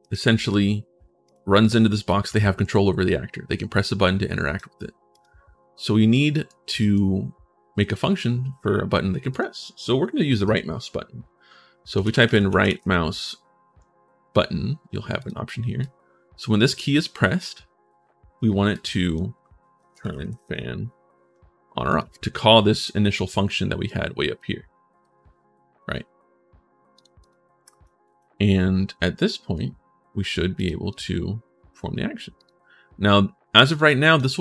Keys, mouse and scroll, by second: 0.1 click, 0.1 right click, 1.0 click, 1.0 right click, 1.4-4.3 right drag, 1.5-2.2 typing, 4.9 click, 5.9 right click, 6.6 right click, 9.1 click, 11.5-13.1 typing, 15.0 click, 15.6 click, 18.5 click, 19.3-20.6 typing, 21.7 click, 22.1 click, 23.2 scroll down 1, 23.6-24.8 right drag, 26.7 right click, 27.0 right click, 27.4 right click, 27.8 right click, 28.9 right click, 30.3 click, 30.7 click, 32.1 click, 33.5 click, 33.9 click.